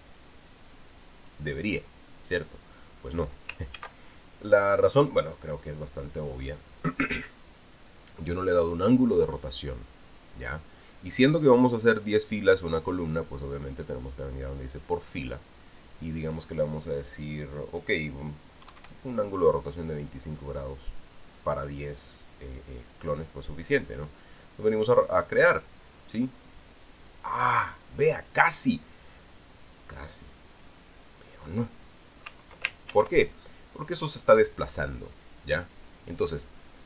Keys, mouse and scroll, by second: 1.3 click, 4.5 ctrl+z, 5.9-8.0 drag, 16.6 click, 19.4 KP_2, 19.6 KP_5, 21.3 click, 26.3 click, 27.6-28.9 drag, 33.7 ctrl+z, 34.6-36.1 drag.